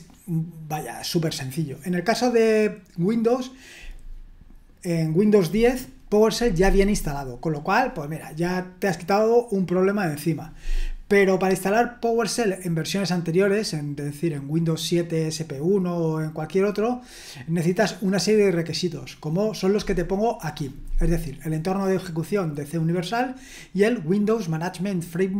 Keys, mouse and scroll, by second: 4.9-11.6 scroll down 1, 11.6-16.6 scroll down 1, 16.6-18.9 scroll down 1, 18.9-20.6 scroll down 1, 20.6-21.9 scroll down 1, 21.9-23.4 scroll down 1, 23.4-25.3 scroll down 1.